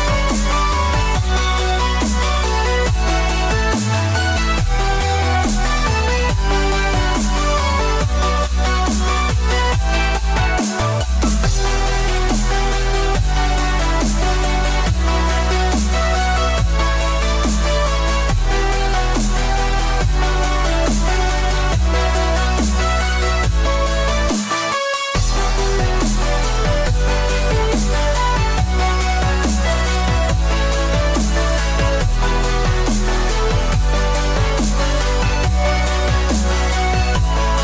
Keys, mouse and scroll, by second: 0.1 x, 1.2 scroll down 2, 2.6 click, 3.2 click, 8.0 scroll up 1, 10.5 scroll up 1, 10.6 ctrl+r, 12.1 ctrl+r, 13.5 ctrl+r, 13.6 click, 15.0 click, 16.4 click, 17.9 click, 18.6 click, 21.5 click, 22.1 click, 25.4 x, 28.5 alt+click, 31.3 alt+click, 32.2 click, 32.9 click, 35.6 click.